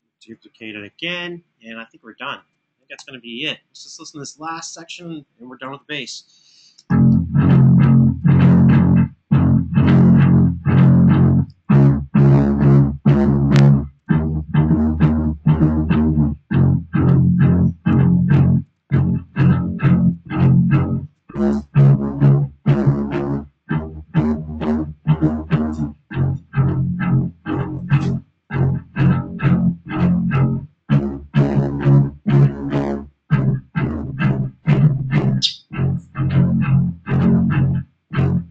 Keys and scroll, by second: 0.6 super+d, 2.6 BackSpace, 5.8 alt+f, 6.5 space.